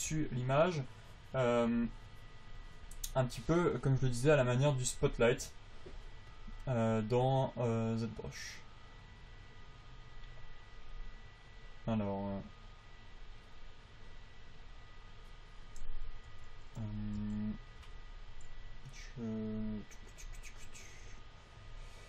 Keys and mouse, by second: 16.2 t, 16.6 t, 17.6 v, 18.2 v.